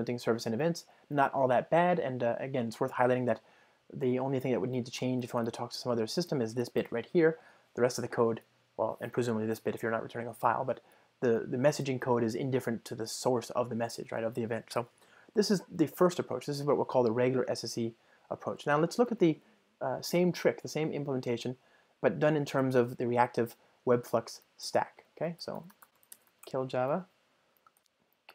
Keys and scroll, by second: 16.0 super+F2.